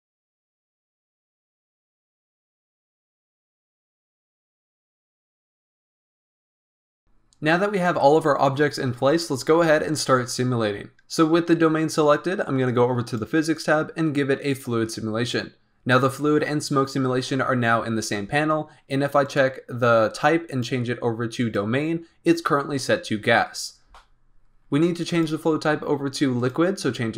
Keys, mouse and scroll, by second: 0.7-2.9 typing, 3.3 scroll down 1, 3.3 middle drag, 3.5 drag, 3.6 middle drag, 3.7 click, 3.8 scroll up 1, 3.9 click, 3.9-5.9 typing, 4.2 click, 4.5 click, 4.8 scroll down 3, 4.8 middle drag, 5.1-5.6 middle drag, 5.8 click, 6.3 scroll down 2, 6.3 middle drag, 6.5 scroll up 1, 6.6 middle click, 6.7 click, 6.9 middle click, 13.0 click, 14.5-17.5 drag, 19.2-23.5 drag, 25.0-27.1 drag.